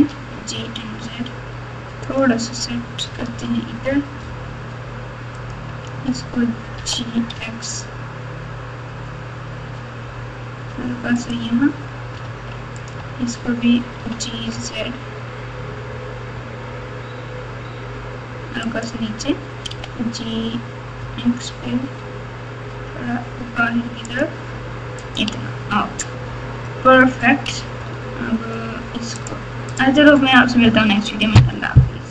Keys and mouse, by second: 3.2 alt+z, 5.3 click, 5.8 alt+z, 6.7 g, 12.2 alt+z, 12.7 click, 13.0 alt+z, 14.0 g, 19.7 g, 24.9 click, 25.3 Tab, 26.9 middle click, 27.6 Tab, 29.2 click.